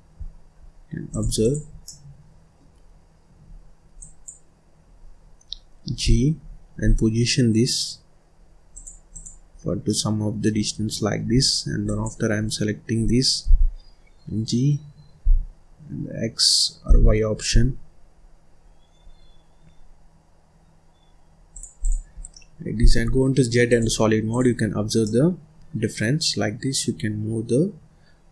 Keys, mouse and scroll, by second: 1.4 click, 1.8 middle click, 2.8-3.9 scroll up 1, 3.9 click, 5.8 g, 9.1 click, 9.5-9.8 scroll down 1, 9.8 middle click, 10.4 scroll up 1, 10.7 scroll down 1, 10.9 middle click, 11.3-11.8 scroll down 1, 11.8 click, 12.5-13.4 scroll up 1, 13.4 g, 21.7 click, 22.1 scroll down 1, 22.3 middle click, 22.9 z, 24.2 click, 24.6-24.9 scroll up 2, 24.9-28.0 middle drag.